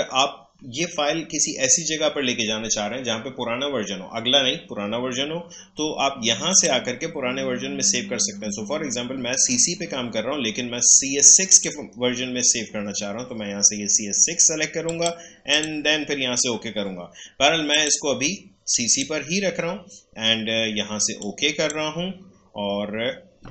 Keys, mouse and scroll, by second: 6.4 click, 11.4 click, 14.8 click, 15.4 click, 21.2-23.5 drag.